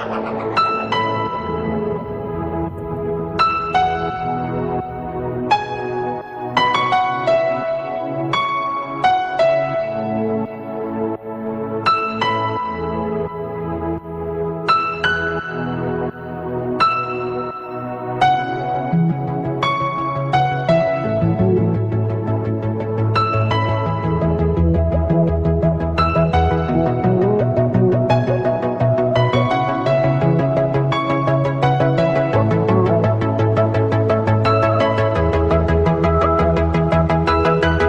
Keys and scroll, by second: 15.4 ctrl+alt+z, 30.1 ctrl+], 31.4 ctrl+alt+z.